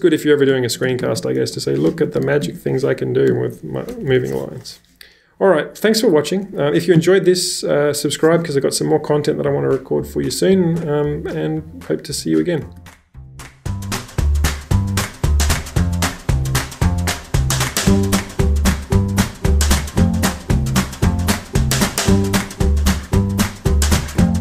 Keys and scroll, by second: 0.3-3.9 typing, 3.9 Escape, 4.1 Escape, 13.0 shift+super+@, 13.4 Escape, 13.4 typing, 21.8 shift+super+@, 22.2 Escape, 22.2 typing.